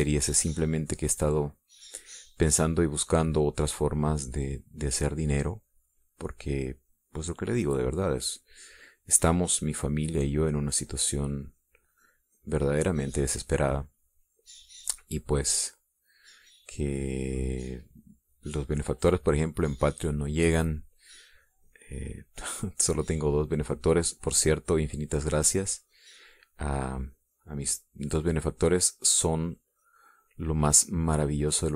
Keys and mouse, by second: 3.1 click, 4.9 click, 5.4 click, 6.6 click, 7.2-10.8 drag, 11.7-13.1 drag, 13.3-16.3 drag, 16.7-17.7 drag, 18.3-20.3 drag, 22.4-23.4 drag, 23.6 click, 24.6 click, 26.5-29.7 drag, 30.1-31.6 drag.